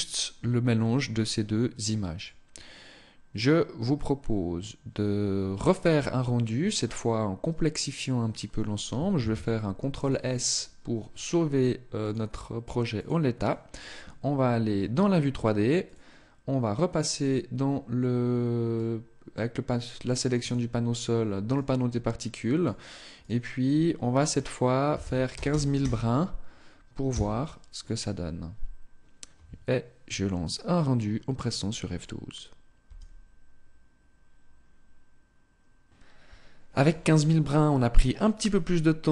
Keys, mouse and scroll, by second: 12.4 click, 15.2 click, 18.0 click, 19.8 click, 20.8 click, 24.0 click.